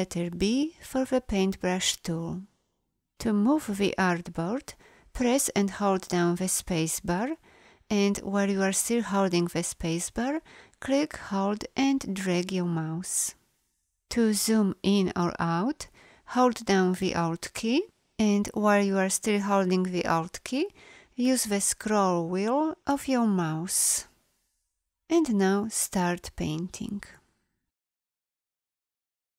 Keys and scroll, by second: 5.2 space, 16.4-18.5 alt+scroll.